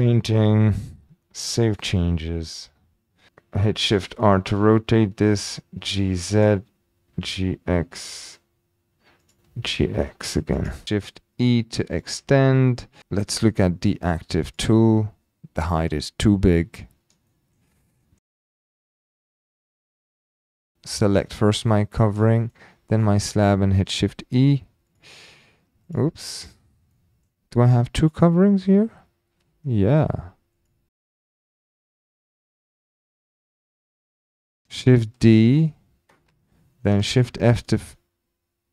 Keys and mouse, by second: 4.0 shift+r, 5.8 g, 5.8 z, 6.4 click, 7.1 g, 7.1 x, 9.2 click, 9.4 g, 9.5 x, 10.5 click, 12.2-13.3 typing, 12.7 middle drag, 14.4 click, 15.4-15.8 shift+middle drag, 17.4 shift+middle drag, 17.7-18.3 middle drag, 18.9 alt+h, 19.8 click, 21.4 shift+drag, 21.7-22.0 drag, 22.3 shift+drag, 23.0 shift+click, 24.1-24.5 typing, 24.9 click, 25.9 click, 26.9-27.2 middle drag, 28.1 click, 30.0 Delete, 30.6 click, 32.9-33.5 middle drag, 33.7 shift+middle drag, 35.0 shift+d, 35.6 right click.